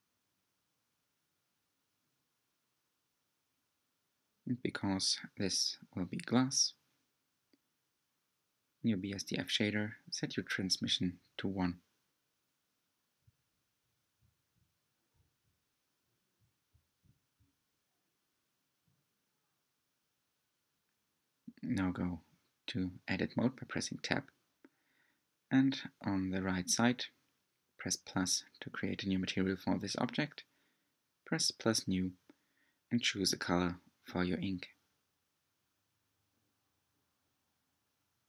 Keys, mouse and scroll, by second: 2.0-5.4 scroll down 5, 8.2 s, 10.5 click, 10.9 g, 14.9-20.0 drag, 20.4-23.3 drag, 27.5 Tab, 29.5-32.7 middle drag, 33.3-34.6 drag, 35.9-38.2 drag.